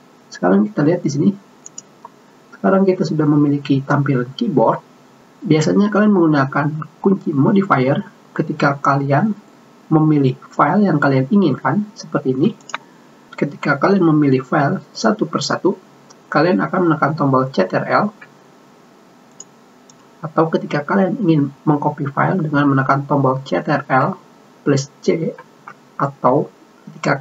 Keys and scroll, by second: 25.6 ctrl+c.